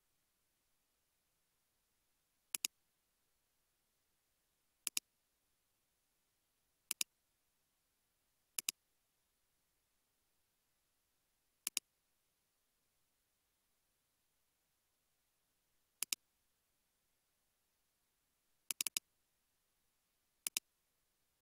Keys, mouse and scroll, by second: 3.5 scroll up 1, 14.2 space, 14.7 space, 18.9 double click.